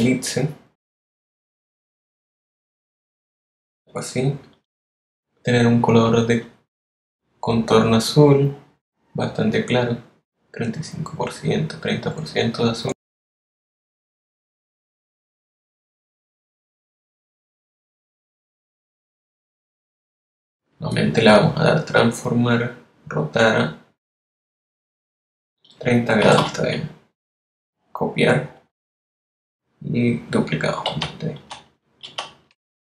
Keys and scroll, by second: 17.7 3, 18.1 0, 26.9-27.7 typing, 31.7 super+d.